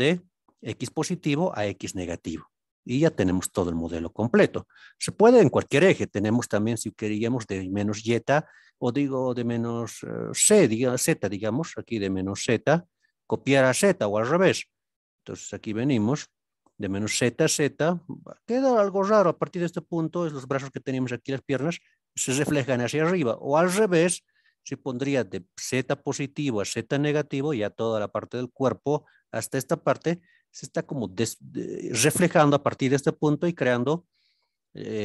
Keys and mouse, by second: 34.7 click.